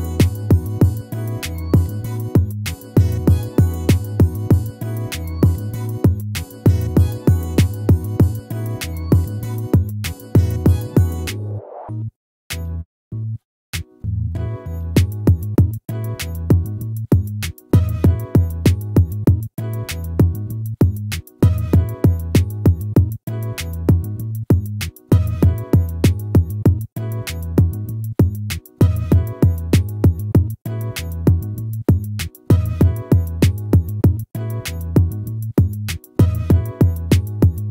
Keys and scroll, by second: 14.2 ctrl+-, 19.6 ctrl++, 28.4 ctrl++, 34.9 ctrl+-, 37.1 ctrl++.